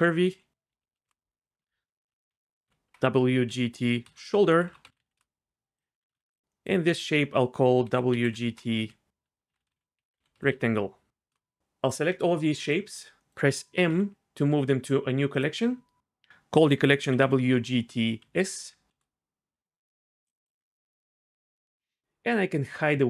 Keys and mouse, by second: 1.6 F2, 6.0 g, 6.1 x, 6.9 F2, 12.6 shift+click, 13.2 middle click, 13.9 m.